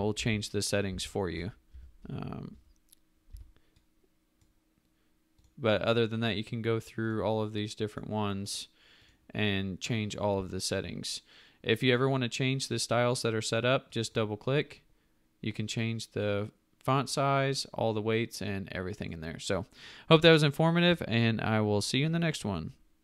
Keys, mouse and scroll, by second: 0.1 ctrl+alt+z, 1.7 Escape, 3.3 v.